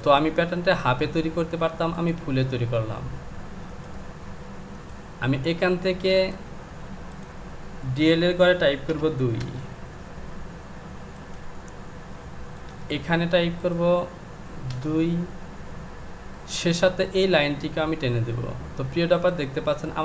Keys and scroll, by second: 8.9 KP_2.